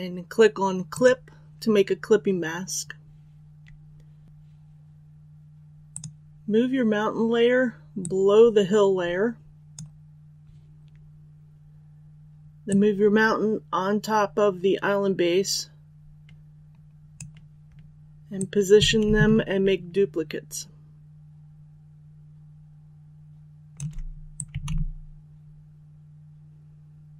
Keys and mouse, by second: 0.8-27.1 drag.